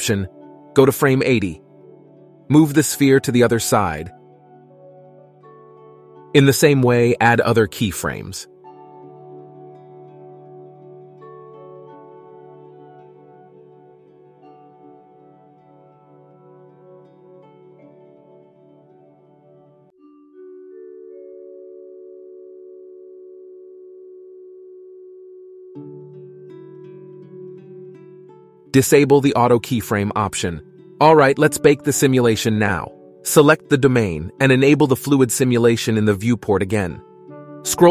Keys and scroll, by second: 3.1 g, 7.0 g, 11.0 g, 14.9 g.